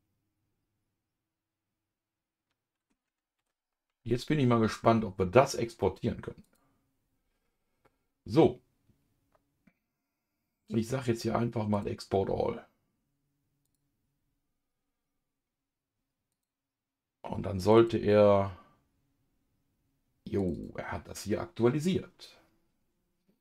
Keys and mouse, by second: 3.4 ctrl+s, 6.4 click, 12.1-13.7 drag.